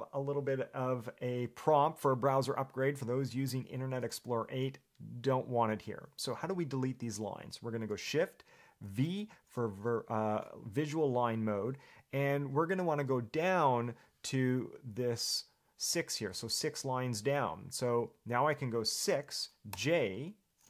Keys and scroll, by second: 9.0 shift+v, 19.3 6, 19.9 j.